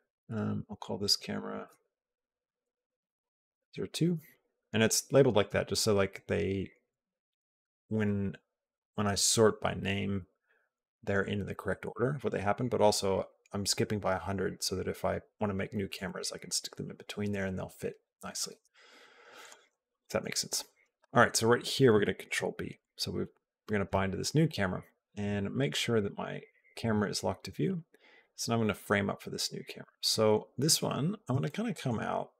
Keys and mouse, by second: 0.5 Left, 0.9 Left, 1.5 Left, 19.2 click, 22.1 ctrl+b, 22.6 click, 25.4 click, 26.2 click, 31.2 shift+middle click.